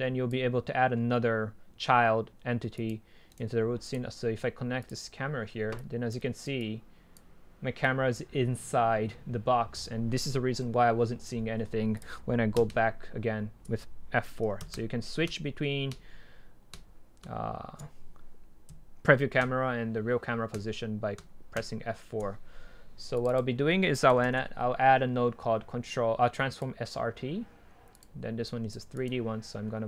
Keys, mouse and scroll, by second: 0.0-2.5 drag, 3.0-3.4 drag, 3.4 right click, 3.9-6.2 drag, 6.2-6.6 right drag, 6.6-10.2 drag, 23.4-25.5 drag, 26.7-29.8 drag.